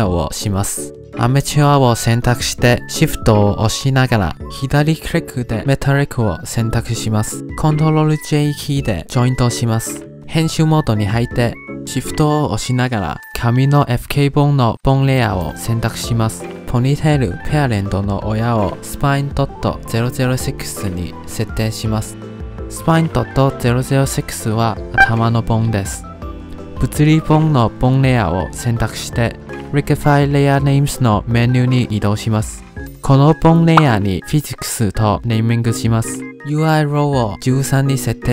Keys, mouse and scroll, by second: 2.6 click, 6.8 shift+click, 9.4 ctrl+j, 9.7 shift+click, 10.7 Tab, 15.6 shift+click, 16.0 click, 16.1 scroll up 5, 16.2 shift+middle click, 16.6 click, 16.8 click, 17.4 click, 17.9-19.9 drag, 19.9 0, 21.8-22.2 scroll down 2, 22.2 middle click, 22.7-23.5 scroll down 1, 23.5 click, 24.2 click, 27.4 click, 28.8 click, 31.1-31.8 scroll down 10, 32.1-32.8 scroll down 10, 32.8-35.3 drag, 36.6-38.3 drag.